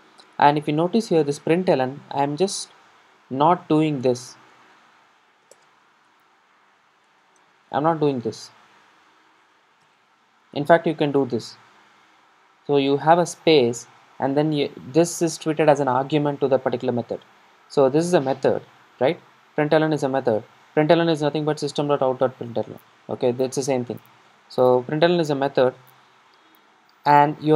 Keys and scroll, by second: 5.5 super+d.